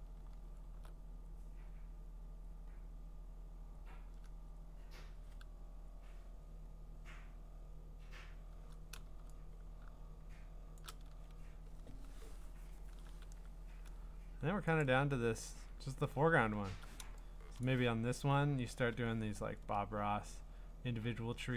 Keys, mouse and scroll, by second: 0.3 scroll down 4, 1.2-1.6 scroll up 2, 1.6-2.3 scroll down 3, 2.3 scroll up 3, 3.7-5.1 scroll down 5, 5.1 scroll down 1, 5.4 scroll up 2, 5.9-6.3 scroll down 1, 6.3-6.6 scroll up 3, 6.6-7.2 scroll down 2, 7.2-7.8 scroll up 1, 7.8-8.1 scroll down 1, 9.0 v, 9.8-10.7 scroll up 1, 10.7 shift+click, 11.2-13.3 scroll down 4, 13.3 v, 13.8 scroll, 14.8 click, 15.5-15.9 scroll, 16.2-17.0 ctrl+scroll, 17.6 click, 18.0 scroll, 19.0 scroll, 19.1-21.0 scroll up 19, 21.0-21.4 scroll down 7, 21.4-21.5 scroll.